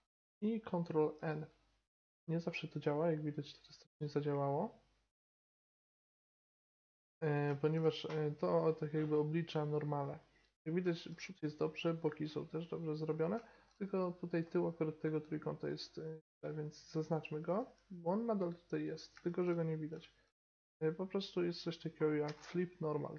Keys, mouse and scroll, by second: 1.2 ctrl+n, 2.0 Tab, 6.8-7.4 middle drag, 11.0-13.7 middle drag, 14.4 Tab, 17.6 g, 17.8 click, 17.8-19.2 right drag, 19.2 middle click, 22.3 space.